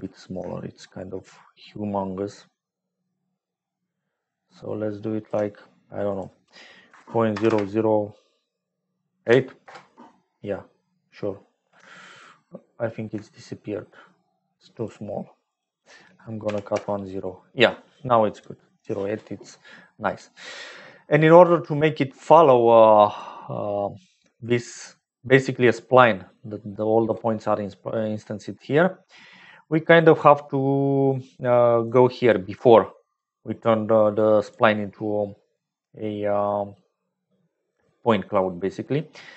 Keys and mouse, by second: 1.5-5.2 shift+drag, 6.0-11.0 drag, 7.4 KP_0, 12.1 shift+middle click, 12.5 shift+click, 13.0 shift+middle click, 14.7-17.5 middle drag, 21.9 middle click, 22.7 click, 23.7 middle click, 26.2 middle click, 27.6 middle click, 31.8 click, 32.8 click, 34.2 click, 34.9 click.